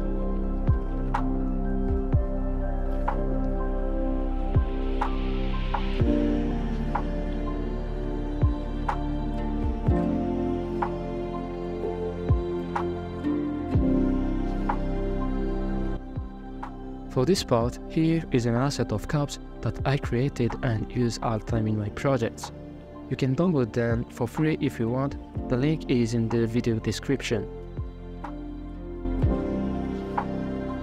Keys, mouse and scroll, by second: 3.5 scroll down 3, 3.7 shift+middle click, 4.0 w, 6.1 s, 8.1 g, 10.7 scroll down 1, 10.8 ctrl+KP_Add, 11.3 g, 13.3 Tab, 13.7 scroll down 4, 14.0-17.4 middle drag, 17.4-18.4 drag, 19.1 middle click, 19.2 scroll up 2, 19.3 shift+middle click, 19.7 click, 20.3 Tab, 20.4 scroll up 3, 20.5 shift+middle click, 20.6 right click, 20.8 shift+s, 20.9 ctrl+z, 21.0 shift+s, 21.3 scroll down 5, 21.4 shift+middle click, 21.6 middle click, 21.7 shift+s, 22.6 Tab, 22.6 right click, 22.9 shift+s, 24.0 middle click, 24.2-26.5 typing, 24.4 scroll down 3, 25.1 alt+z, 26.4 click, 27.6-29.4 typing, 27.8 alt+z, 28.0 middle click, 28.8 middle click, 29.5 scroll down 3, 29.5-30.1 middle drag, 30.1-30.6 scroll up 5, 30.6 middle click.